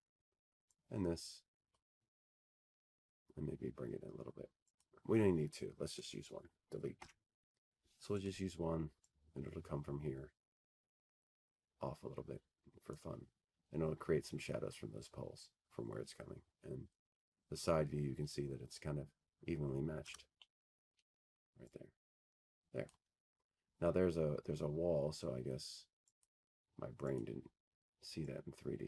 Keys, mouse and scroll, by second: 2.5-4.6 drag, 5.2-7.0 drag, 10.6 click, 11.6 click, 12.7 Delete, 13.9 Delete, 13.9 click, 18.5 click, 23.6-24.4 scroll, 24.4 middle click, 25.6 F3, 26.7 middle click, 28.4 click, 28.4 middle click.